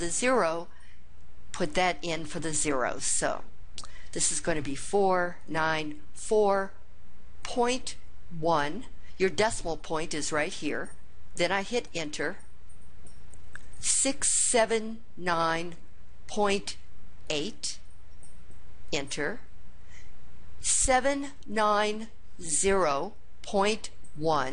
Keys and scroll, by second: 4.3 4, 5.2 9, 6.0 4, 7.2 ., 8.3 1, 11.7 Return.